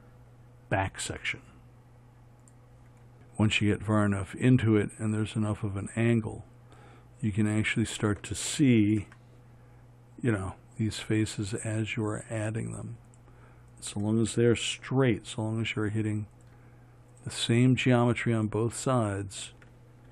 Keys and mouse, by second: 2.9 f, 9.4 f, 15.2 f.